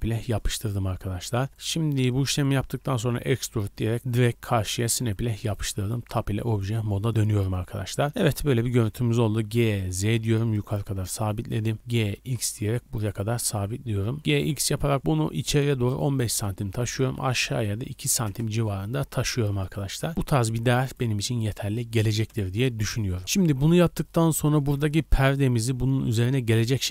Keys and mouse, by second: 1.4 shift+click, 2.1 shift+middle click, 3.1 e, 5.0 shift+middle click, 5.4 middle click, 6.1 Tab, 6.9 shift+middle click, 7.1 middle click, 9.3 g, 10.2 ctrl+click, 11.7 g, 12.8 ctrl+click, 14.2 g, 16.9 g, 19.7 drag, 19.9-20.3 middle drag, 20.5-26.9 middle drag.